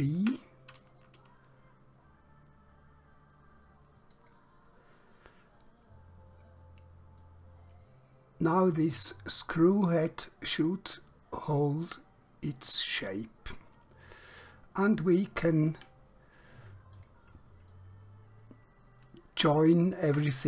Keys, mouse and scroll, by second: 4.2 click, 6.3 scroll up 1, 7.3 middle click, 13.7 scroll down 1, 14.3 scroll up 1, 15.9 Escape, 17.1 click, 17.8 middle click, 20.2 Tab.